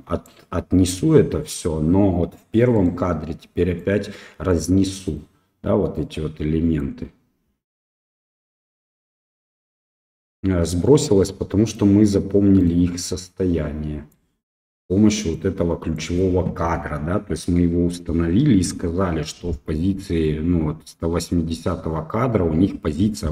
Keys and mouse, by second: 2.7 click, 3.8 click, 5.1 click, 5.9 click, 8.0 click, 8.6 click, 10.0 click, 10.9 click, 12.6 click, 13.3 click, 14.7 click, 15.3 click.